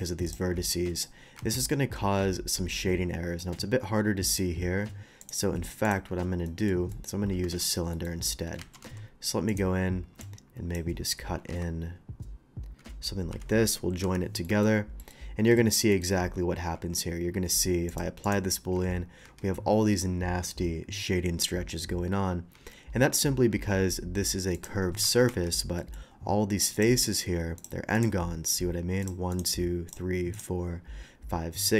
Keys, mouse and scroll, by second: 0.2 click, 0.9 click, 1.3 scroll down 1, 1.6-2.7 middle drag, 3.4 middle click, 4.2 click, 5.2 click, 5.8 click, 6.1 middle click, 6.4 middle drag, 6.9 middle click, 7.4 d, 7.9 middle click, 8.8 alt+w, 8.8 d, 9.5 click, 10.2-10.7 drag, 11.4 e, 13.3 j, 14.0 Return, 14.4 middle drag, 15.0 middle click, 15.2 middle click, 15.5 shift+middle drag, 15.9 shift+middle click, 17.9 shift+click, 18.2 shift+click, 18.7 Tab, 19.3 Tab, 22.5 Tab, 22.9 scroll up 1, 24.5 click, 24.9 scroll up 1, 25.7 middle click, 26.1 middle click, 26.7 click, 27.0 click, 27.9 Tab, 29.0 click, 29.3 click, 29.9 click, 30.3 click, 31.6 middle click.